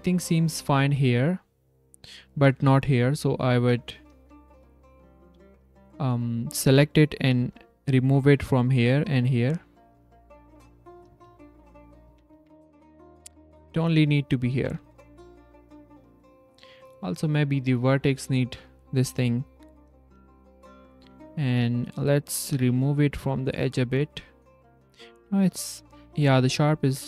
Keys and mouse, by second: 1.0 Tab, 4.0 click, 4.2 z, 4.6 c, 5.4 g, 7.0 click, 7.6 z, 8.1 z, 8.9 click, 9.4 click, 9.8 z, 10.7 click, 11.8 click, 12.3 Tab, 12.6-13.0 drag, 13.6 s, 13.7 drag, 14.2 click, 14.4 Tab, 14.6 z, 14.8 s, 14.8 click, 15.1 z, 15.2 click, 15.6 click, 17.2 click, 19.3 click, 20.0 z, 20.6 s, 21.0 z, 22.5-23.7 drag, 25.2 click, 26.2 Tab.